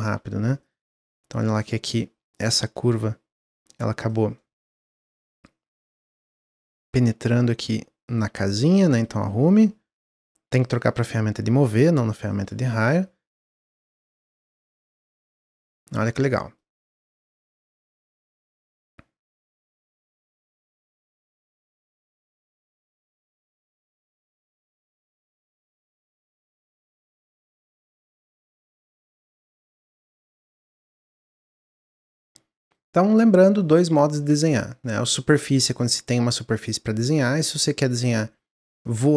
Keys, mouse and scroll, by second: 0.5 click, 1.0-2.3 drag, 2.4 middle click, 2.7-3.3 scroll up 1, 3.5 click, 4.0 click, 4.3 middle click, 5.2 click, 6.2 click, 7.3 click, 7.9 click, 8.8 click, 9.3-12.3 drag, 13.7 middle click, 14.5 click, 15.2 middle click, 15.6 scroll down 2, 15.8 Tab, 16.1-16.5 middle drag, 16.5-16.8 scroll down 1, 16.8-21.9 middle drag, 24.0-29.2 middle drag, 31.3-34.2 middle drag, 34.2 Tab, 35.2-38.3 middle drag, 38.7-39.1 middle drag.